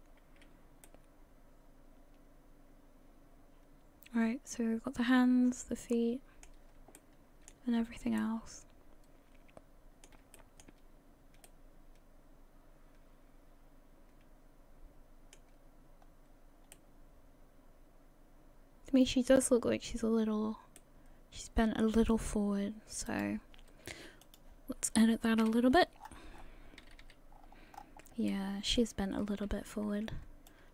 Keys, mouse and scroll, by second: 0.2-0.9 scroll down 2, 0.9 middle click, 7.0 shift+middle click, 7.8-8.2 scroll down 3, 8.2 middle click, 8.9 middle click, 9.5 shift+middle click, 10.4 shift+middle click, 10.6 shift+middle click, 11.2-11.5 scroll down 1, 11.5 middle click, 16.0-16.7 scroll down 2, 16.7 middle click, 19.5 scroll up 2, 20.8 middle click, 22.5 scroll up 1, 23.1 right click.